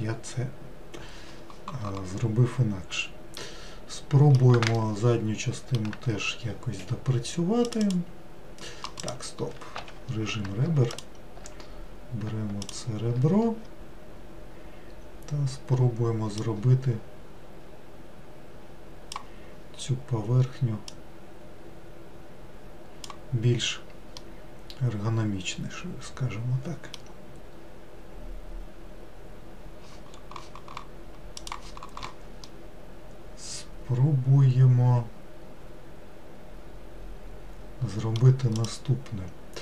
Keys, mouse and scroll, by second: 3.5-7.7 middle drag, 7.7 click, 7.9 click, 9.1 click, 9.9 2, 11.0 alt+click, 12.7 alt+click, 16.4 click, 21.0 click, 24.3-27.4 middle drag, 32.5-35.6 middle drag, 38.6 click.